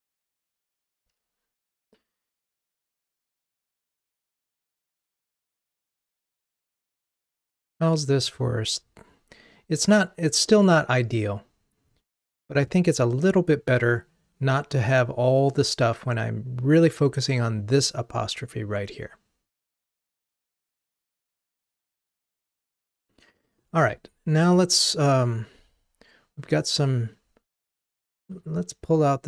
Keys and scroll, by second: 1.3 ctrl+r.